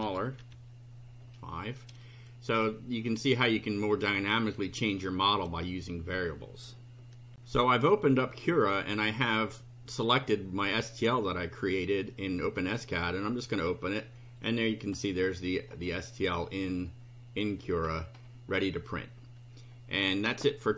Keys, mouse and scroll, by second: 0.0 BackSpace, 0.4 F5, 7.3 ctrl+r, 12.5 click, 14.8 click, 15.2 middle click, 16.0 click, 16.7 right click, 17.6-18.4 scroll up 3.